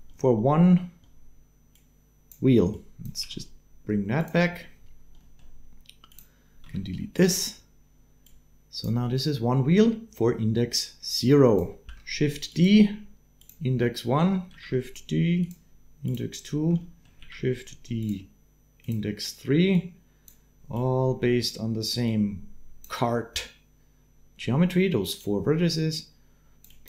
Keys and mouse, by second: 1.5-2.9 drag, 3.0 g, 5.2 click, 5.9 click, 6.4 x, 6.9 click, 8.0 click, 8.3 click, 10.9 click, 11.4 click, 11.7 shift+d, 14.3 shift+d, 15.9 click, 16.6 click, 17.0 shift+d, 19.5 click, 20.5 click.